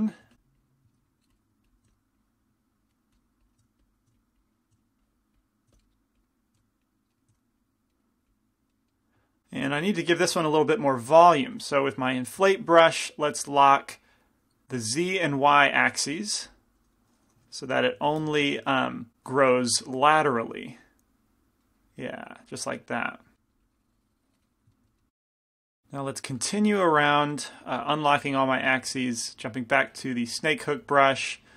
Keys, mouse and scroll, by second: 0.4 f, 1.8-4.0 drag, 1.9 f, 3.7-7.4 typing, 4.4-7.2 drag, 5.9 middle click, 7.2-9.8 middle drag, 7.5 click, 8.3-9.8 drag, 12.7 i, 13.6-14.6 drag, 15.0-18.5 drag, 15.8 ctrl+f, 17.6 i, 18.1 f, 18.5 middle click, 19.5-21.2 drag, 19.5 right click, 20.9-24.3 middle drag, 22.2-24.3 drag, 23.5 right click, 23.7 right click, 24.8 middle click, 27.9-31.5 drag, 27.9-29.0 right drag, 31.4 right click.